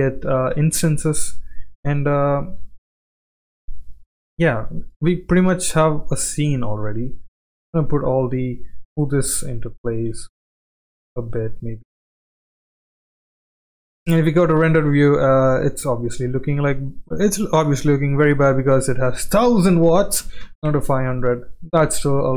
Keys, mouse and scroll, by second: 1.2 click, 2.6 alt+d, 4.2 g, 5.3 drag, 5.8 click, 7.5 alt+d, 8.6 g, 10.0 g, 12.9-13.3 shift+middle drag, 13.5 click, 13.8 z, 15.1 shift+middle drag, 16.1 click, 18.3-22.3 drag, 20.6 KP_0.